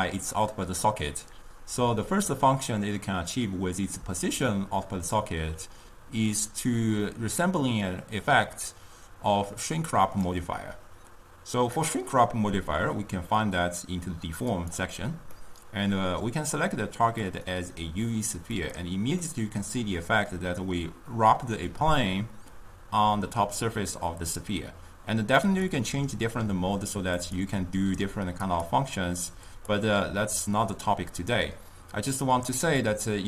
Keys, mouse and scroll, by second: 8.0-11.2 drag, 14.7 click, 15.4-17.4 middle drag, 17.4 click, 19.3-22.3 middle drag, 25.7-31.7 drag.